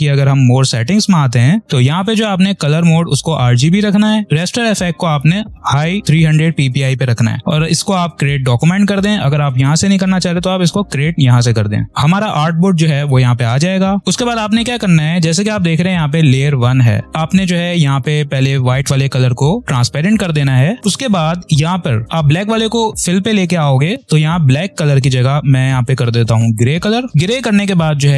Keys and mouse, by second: 9.4 click, 14.0 ctrl+-, 19.6 click, 20.8 click, 26.4 click, 28.0 right click, 28.0 right click.